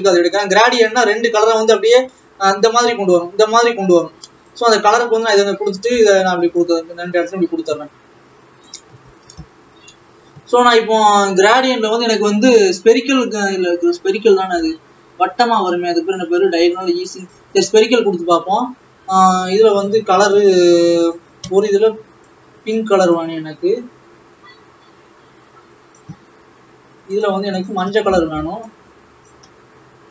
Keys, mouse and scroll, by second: 2.0-5.3 scroll up 4, 5.3 click, 6.8 click, 7.8-10.0 drag, 10.0 scroll up 2, 11.4-17.6 drag, 19.9 click, 22.2 click, 27.3-30.1 drag.